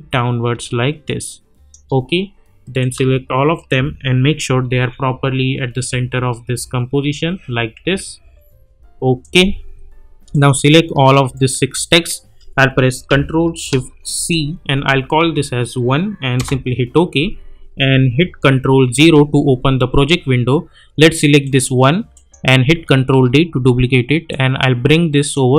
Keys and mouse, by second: 3.5 shift+click, 4.4 Up, 5.6 Right, 6.5 Left, 7.1 Up, 7.8 Left, 8.2 Down, 9.2 click, 11.3 shift+click, 14.1 ctrl+shift+c, 15.2 1, 16.4 Return, 21.4 click, 23.1 ctrl+d, 24.3-25.5 drag.